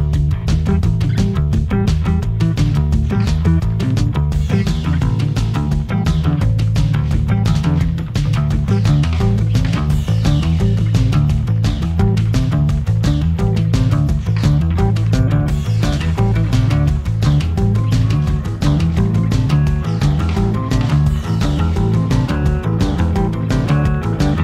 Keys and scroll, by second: 1.9 super+j, 2.4 v, 4.8 shift+Right, 9.2 v, 11.9 i, 13.6 v, 24.2 super+z.